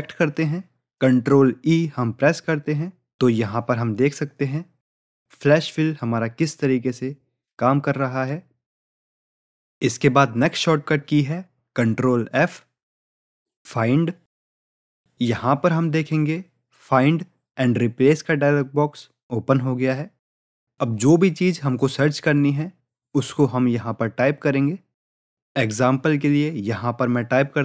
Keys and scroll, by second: 1.1 ctrl+e, 6.9 ctrl+e, 14.9 ctrl+f.